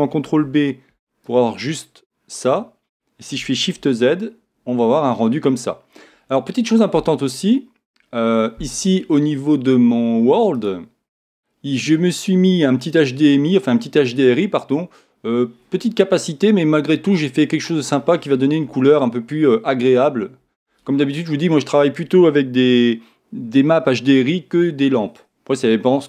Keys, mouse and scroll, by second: 5.6-10.0 middle drag, 10.5-12.4 drag.